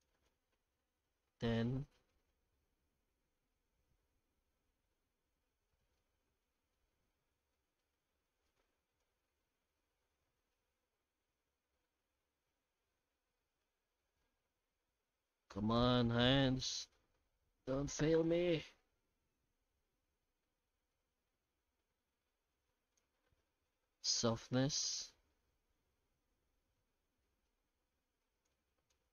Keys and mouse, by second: 0.0-2.8 drag, 4.9-6.4 middle drag, 7.5 middle click, 9.0-22.9 shift+drag, 24.2-28.4 drag, 28.9-29.1 drag.